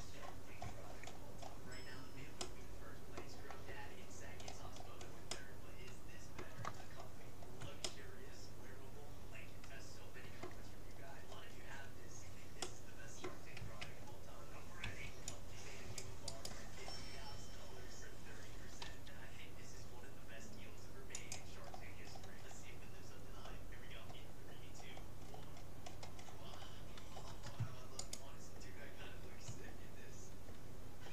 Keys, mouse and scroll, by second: 3.9 middle click, 4.1 middle click, 5.3-7.3 middle drag, 7.3-7.7 scroll down 1, 7.7-9.7 middle drag, 11.1-12.7 middle drag, 13.6 a, 14.9 c, 16.9 middle click, 18.9 g, 21.7-28.1 middle drag, 28.1-29.7 right drag.